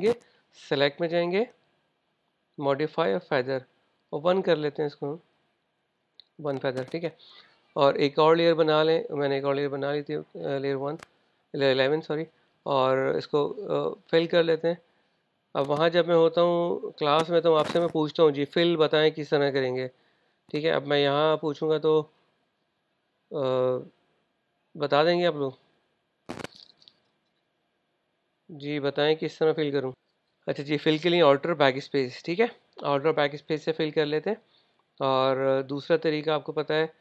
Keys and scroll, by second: 29.4 super+Tab.